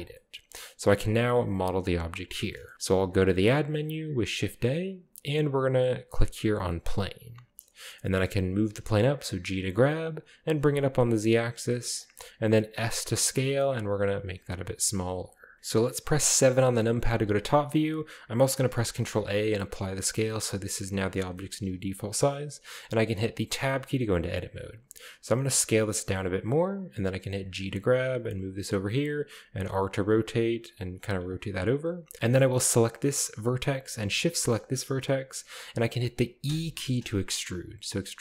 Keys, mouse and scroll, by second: 0.1-1.7 middle drag, 2.5-3.5 middle drag, 3.1 shift+a, 6.6-7.7 drag, 7.7-8.6 scroll down 2, 8.3 middle click, 8.6 g, 10.4 z, 12.0 click, 12.9 s, 15.2 click, 16.5 KP_7, 17.3-18.2 scroll up 1, 18.8 ctrl+a, 21.0 shift+click, 21.5 shift+middle click, 21.5-22.4 shift+scroll up 2, 23.2-23.6 scroll down 2, 23.6 Tab, 23.8-24.8 scroll down 1, 25.3 s, 26.1-26.6 drag, 27.3 g, 28.6 click, 29.6-31.4 typing, 30.2 click, 31.0 click, 31.3 click, 31.6 click, 31.9 scroll up 1, 32.3-32.9 shift+middle drag, 32.8 right click, 34.2 shift+right click, 34.5 shift+right click, 36.5 e.